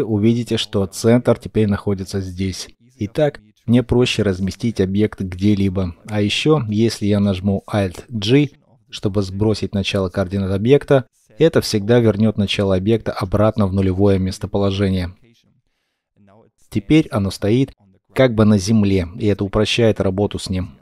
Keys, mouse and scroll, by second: 0.9 g, 1.4 right click, 3.3 right click, 5.4 right click, 6.8 alt+g, 8.8 scroll up 1, 9.4 shift+middle click, 15.3-15.6 scroll down 1, 15.6 shift+middle click.